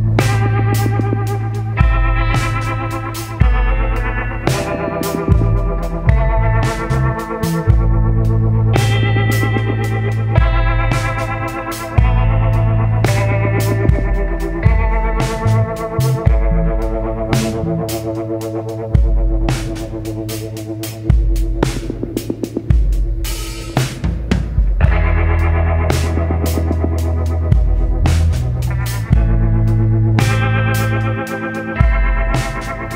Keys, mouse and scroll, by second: 2.9-8.2 shift+drag, 8.2-12.4 shift+drag, 13.3 Delete, 14.9 F4, 15.3 right click, 16.7-21.1 drag, 21.1 right click, 22.5 click, 25.3 right click, 27.3 click, 29.2-31.1 typing, 31.9 Return.